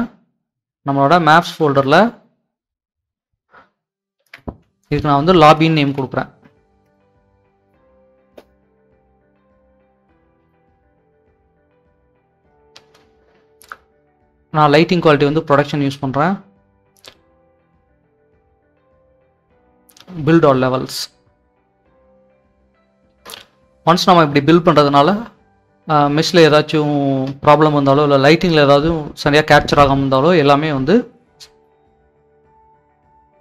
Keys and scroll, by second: 4.1-5.9 typing, 6.8 Return, 6.9-7.9 typing, 10.3-11.0 typing, 13.5-14.2 typing.